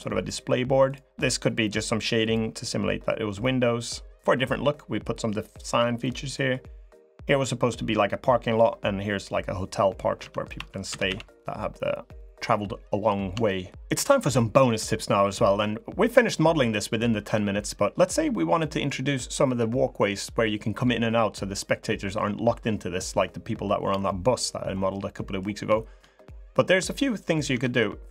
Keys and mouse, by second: 1.0 click, 2.0 click, 2.4 middle click, 3.2 middle click, 4.3 middle click, 5.8 click, 8.0 click, 10.0 Tab, 10.3 Tab, 10.6 a, 10.8 a, 11.1 click, 11.9 click, 13.2 shift+middle click, 18.3 middle click, 18.4 click, 24.8 middle click, 25.5 shift+middle click, 27.3 Tab, 27.8 3.